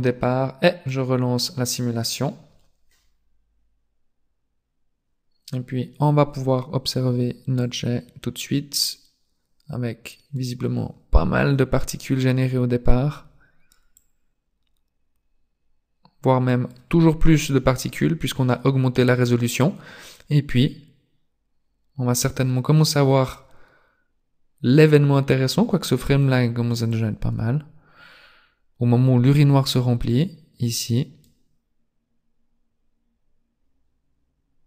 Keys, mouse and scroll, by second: 0.8 click, 7.6 click, 14.0 click, 20.3 click, 26.9 click, 33.6 click.